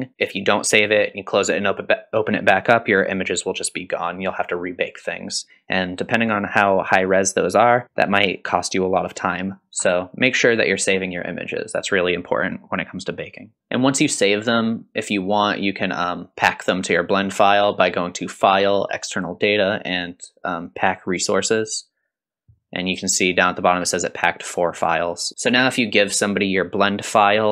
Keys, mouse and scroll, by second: 13.6 click, 15.4-21.6 drag.